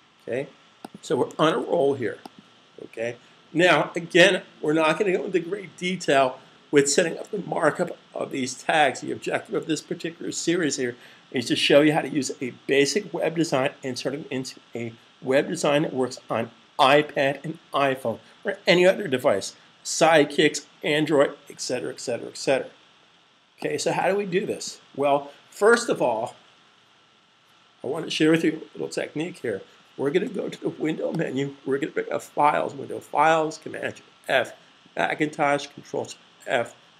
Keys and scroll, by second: 0.7-1.1 typing, 1.3 super+s, 2.2-3.0 typing, 4.2 typing.